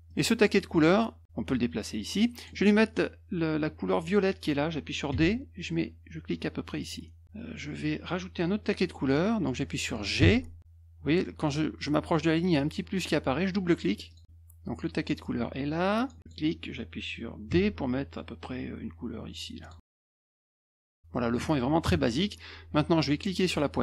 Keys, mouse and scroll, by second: 0.1-2.4 drag, 5.1 d, 6.8 click, 10.2 g, 14.1 click, 14.2 click, 15.2 click, 16.2 click, 17.5 d, 19.6 click, 19.8-20.8 drag, 21.1 middle click, 21.8 -, 23.5-23.8 drag.